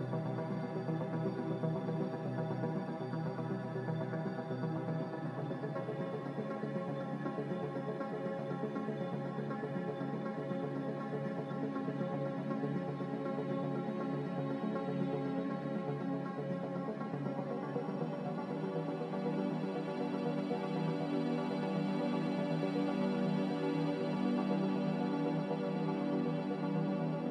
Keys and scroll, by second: 4.9 s, 5.8 4, 8.1 typing, 9.1 Tab, 9.9-10.6 typing, 13.1-14.1 typing, 17.7 z, 19.2 typing, 19.5 Return, 22.7 x, 23.2 x, 27.0 a.